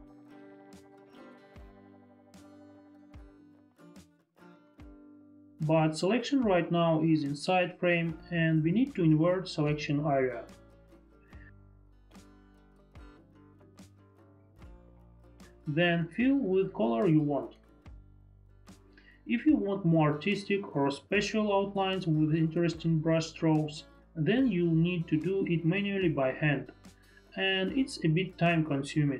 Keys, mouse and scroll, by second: 0.5 click, 1.3 click, 2.9 click, 7.6 alt+q, 9.0 alt+q, 11.3 ctrl+i, 13.2 alt+q, 14.3 alt+q, 15.2 alt+q, 18.9 ctrl+BackSpace, 20.1 ctrl+BackSpace, 20.6 ctrl+d, 21.1 ctrl+BackSpace, 21.5 ctrl+u, 22.9 click, 25.2 click, 28.2 F4.